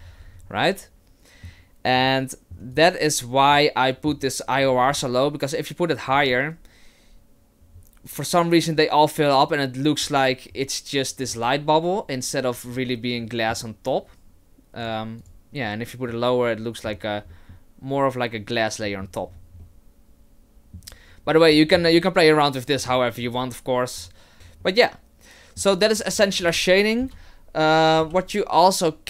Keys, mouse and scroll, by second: 0.0-0.5 scroll up 5, 0.5 middle click, 2.0 middle click, 2.8 right click, 3.5 middle click, 4.7-5.4 scroll up 5, 6.1 click, 6.2 click, 11.3 middle click, 14.8 click, 15.2 click, 16.1 middle click, 17.3 middle click, 18.9 middle click, 19.3-19.6 scroll down 3, 19.6 middle click, 21.7-22.3 scroll up 3, 22.8 click, 23.2 s, 24.3 click, 24.4-24.9 scroll down 2, 24.6 middle click, 26.1-26.7 scroll down 1, 26.7-27.0 scroll down 1, 27.0 KP_0, 28.0 KP_1.